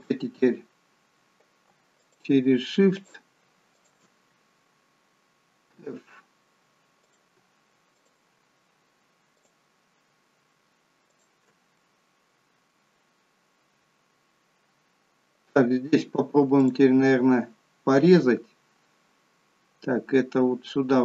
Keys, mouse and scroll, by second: 2.0 shift+click, 3.0 shift+click, 4.0 shift+click, 5.8 f, 7.1 click, 8.0 shift+click, 9.4 click, 11.1 shift+click, 11.8 middle click, 13.4-14.1 scroll up 1, 14.7 scroll down 1, 16.7 click.